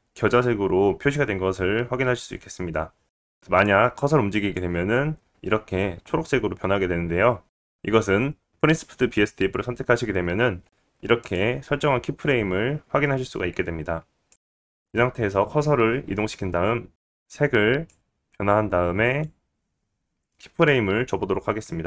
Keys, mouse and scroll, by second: 3.6-8.8 drag, 11.9 click, 11.9-17.2 right drag, 14.7-17.2 drag, 18.2-21.1 drag, 21.1-21.8 right drag.